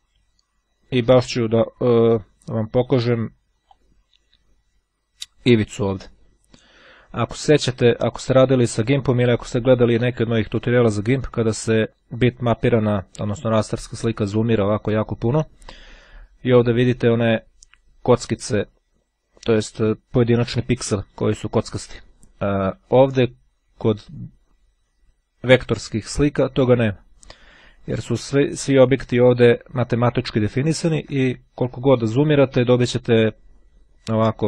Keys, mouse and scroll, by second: 0.1-1.0 ctrl+scroll down 2, 1.0 ctrl+scroll down 1, 2.5-4.2 drag, 4.4-5.0 scroll up 2, 5.0-5.6 scroll down 2, 5.6 ctrl+scroll down 1, 6.0-6.6 ctrl+scroll up 2, 6.6-7.0 ctrl+scroll up 1, 7.1-7.7 ctrl+scroll up 2, 7.7 ctrl+scroll up 1, 10.6-11.2 ctrl+scroll down 2, 11.6-12.2 ctrl+scroll up 2, 12.3-12.8 ctrl+scroll up 2, 14.1-15.2 ctrl+scroll up 2, 23.1-23.9 scroll down 2, 24.5-25.2 ctrl+scroll down 2, 25.5-26.0 ctrl+scroll down 2, 26.0-26.7 ctrl+scroll down 1, 27.2-27.8 ctrl+scroll up 2, 28.1-29.2 ctrl+scroll up 2, 30.0 ctrl+scroll up 2, 30.8-31.6 ctrl+scroll up 2, 31.9-32.6 ctrl+scroll up 2, 32.6-33.1 ctrl+scroll up 1.